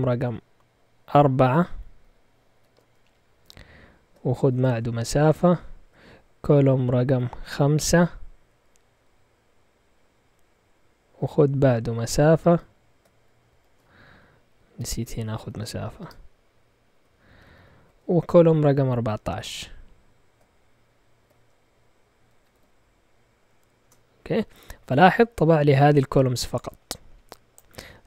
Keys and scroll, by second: 2.5-3.3 typing, 4.4 typing, 7.1 typing, 8.6 typing, 12.4 typing, 13.4 typing, 14.9-18.0 typing, 21.2-23.0 typing, 23.8 Return.